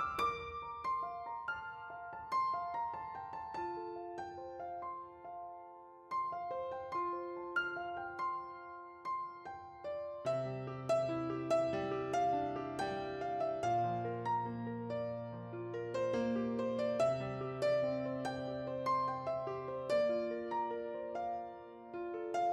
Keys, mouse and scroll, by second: 0.4 typing, 0.8 Return, 2.2 p.